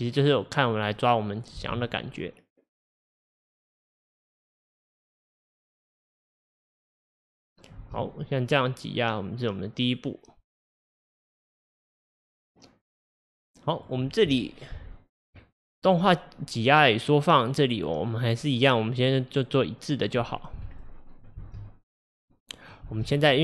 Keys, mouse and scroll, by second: 1.6 space, 7.8 space, 8.2-11.2 drag, 16.1-20.8 drag, 19.9 scroll down 1, 20.8-21.1 drag, 20.8-21.4 middle drag, 21.4 space, 22.9 space, 23.1 middle click.